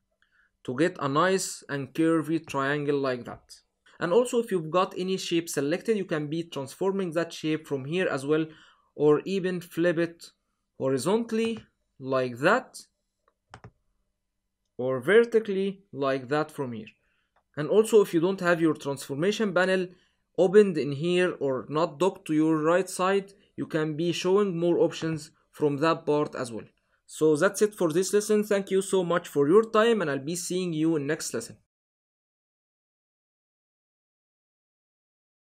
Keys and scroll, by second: 12.9 super+z.